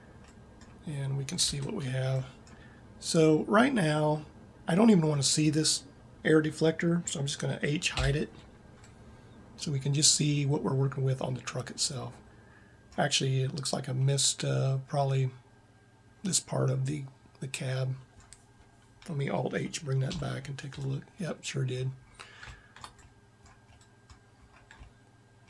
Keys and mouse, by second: 1.4 Tab, 7.8 h, 14.3 middle click, 16.2 middle click, 17.3 middle click, 19.9 alt+h, 21.3 middle click, 21.9 middle click.